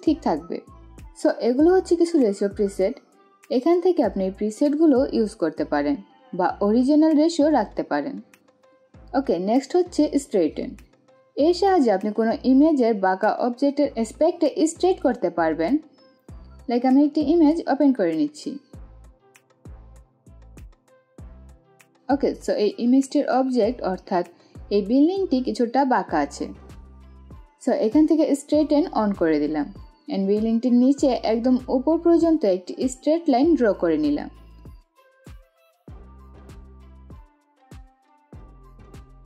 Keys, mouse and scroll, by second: 8.8 click, 17.2 click, 18.2-18.5 scroll down 1, 18.5-19.4 scroll up 1, 19.6-21.8 drag, 29.2 click, 30.3-35.0 drag, 36.1-39.2 drag.